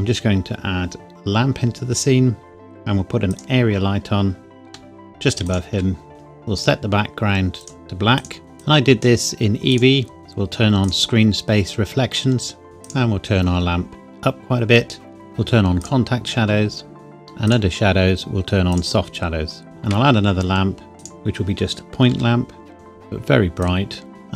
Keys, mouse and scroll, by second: 3.3 click, 4.0 scroll down 1, 4.7 g, 5.5 click, 5.8 s, 6.1 click, 10.8 click, 12.8 click, 19.6 shift+a, 21.0 click, 22.1 g, 22.7 click.